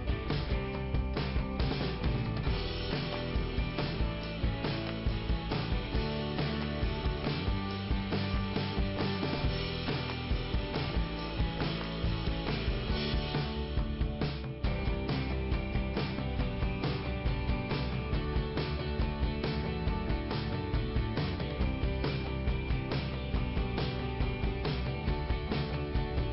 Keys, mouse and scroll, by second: 6.0-7.1 scroll up 1, 7.4 click, 10.2 click, 12.7 click, 18.2 alt+i, 19.3 scroll up 2, 21.3 click, 25.2 click, 26.1 click.